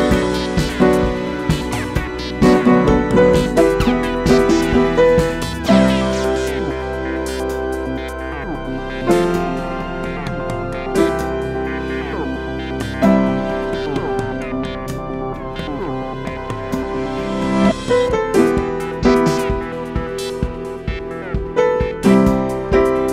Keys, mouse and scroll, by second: 7.2 alt+scroll up 1, 8.3-18.3 drag, 18.3 space, 18.6 click, 20.5-21.1 scroll down 1, 22.3-23.1 drag.